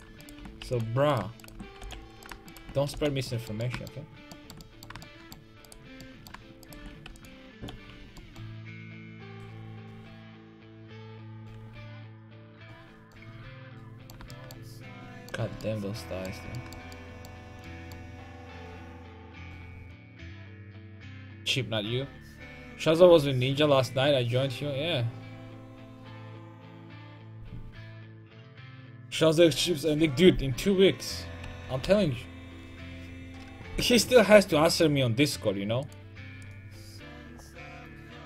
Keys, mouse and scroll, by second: 0.7 alt+m, 1.8 alt+m, 2.9 alt+m, 3.5 middle click, 4.4 middle click, 4.6 middle click, 5.7 right click, 6.2 right click, 7.2 click, 7.2 right click, 7.5 alt+m, 8.2 a, 8.5-9.9 right drag, 10.1 click, 10.1 right click, 10.3 click, 12.5 Tab, 15.4 Tab, 31.6 KP_5, 31.8 KP_1.